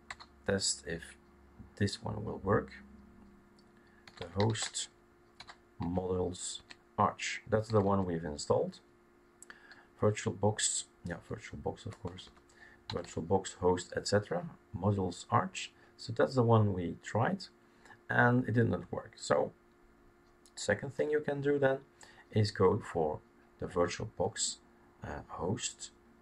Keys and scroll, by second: 3.8-5.8 typing, 6.6 Tab, 7.4-8.1 typing, 11.1-13.5 typing, 21.0 BackSpace, 23.4 BackSpace.